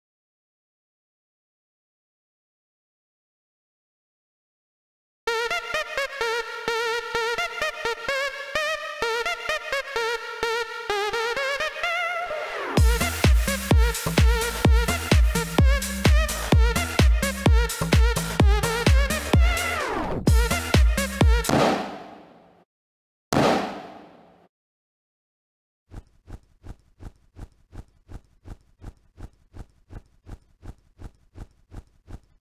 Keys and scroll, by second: 0.0 o, 1.7 z, 2.6 o, 3.3 z, 4.3 o, 5.1 x, 11.2 c, 15.2 c, 17.9 c, 21.3 q, 22.7 o, 23.2 q, 24.5 o, 25.7 space, 25.9 w, 27.0-28.1 typing, 31.9 d.